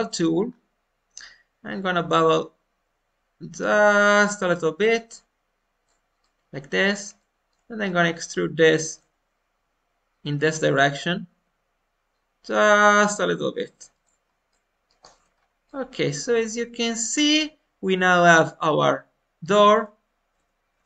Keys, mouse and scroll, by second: 0.4-1.1 scroll up 1, 1.6-6.1 drag, 6.1-7.7 middle drag, 7.7 scroll up 1, 7.8-10.8 middle drag, 11.3 e, 14.4 middle click, 14.9 click, 15.1 Tab, 15.3 scroll down 1, 15.6-17.1 middle drag, 17.1 scroll down 1, 17.3-19.4 middle drag.